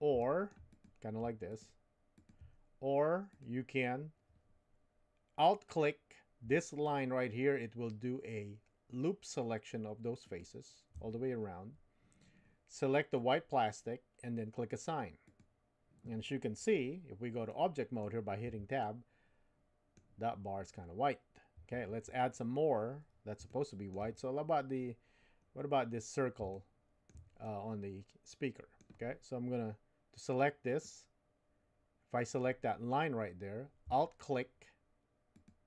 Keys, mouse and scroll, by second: 0.2 shift+middle click, 0.7 click, 1.5 shift+click, 3.3 click, 10.2 alt+click, 13.1 click, 15.3 click, 17.5 middle click, 18.5 Tab, 18.8-20.0 middle drag, 23.4 shift+middle click, 26.5-28.9 shift+middle drag, 30.7-32.5 drag, 35.3 alt+click.